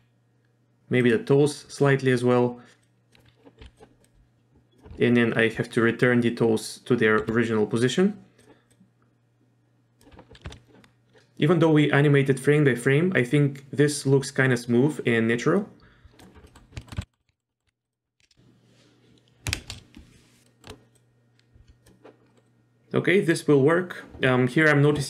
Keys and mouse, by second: 2.8 click, 3.6 r, 4.0-4.8 drag, 7.2 r, 8.7-10.0 drag, 11.2-16.2 drag, 16.4 middle click, 16.8 shift+middle click, 17.0 z, 17.1 middle drag, 17.2 middle drag, 17.5 shift+middle click, 17.9 click, 18.2 shift+space, 19.6 shift+space, 20.5 shift+middle click, 20.9-21.8 drag, 22.3 middle click, 22.4-22.8 drag.